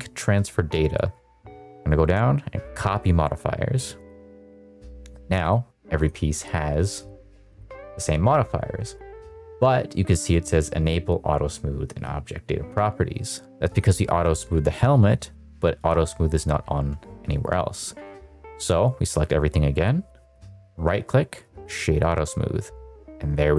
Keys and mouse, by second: 5.3 click, 5.9 click, 7.5 click, 13.6 click, 16.6 a, 20.2 right click, 23.4 middle drag.